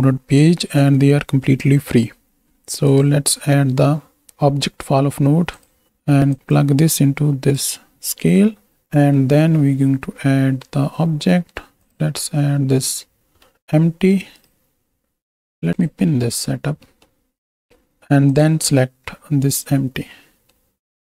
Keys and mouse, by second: 5.5 click, 6.6-7.7 drag, 8.0 click, 8.9 shift+a, 13.5 middle click, 14.6 click, 15.7 click, 16.4 middle click, 16.8 middle click, 20.1 click.